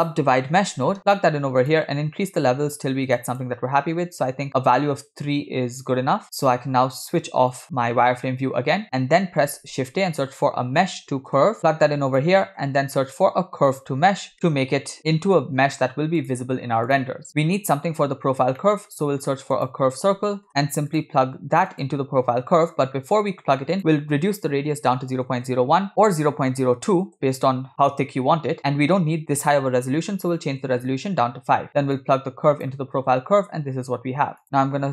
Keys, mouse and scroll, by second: 3.1 click, 3.3 click, 7.7 click, 9.6 shift+a, 12.8 shift+a, 17.5-17.8 scroll up 1, 18.6 middle click, 19.0 shift+a, 23.0 scroll up 1, 23.8-25.4 drag, 24.9 0, 25.9-27.1 drag, 28.6-30.7 drag, 32.0-32.8 drag, 34.4-34.9 drag.